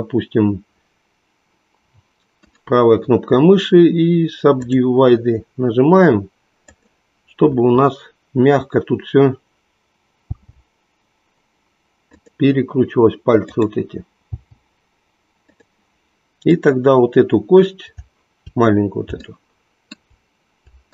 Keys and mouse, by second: 2.5-4.8 right drag, 10.3 g, 13.4 click, 14.4 g, 16.4 click, 20.8 shift+click.